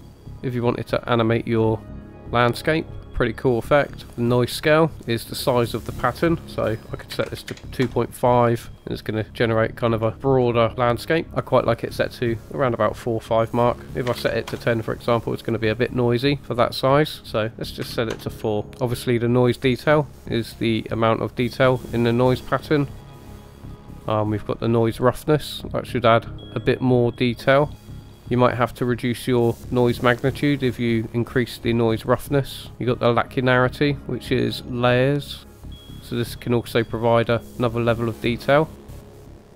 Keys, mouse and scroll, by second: 5.2-8.2 drag, 8.7 middle drag, 9.8-10.1 scroll up 2, 10.1 middle click, 11.3 scroll down 2, 11.5-14.7 drag, 17.2-18.3 drag, 19.4-23.8 drag, 24.5-28.2 drag, 30.0-32.7 drag, 33.4-39.2 drag.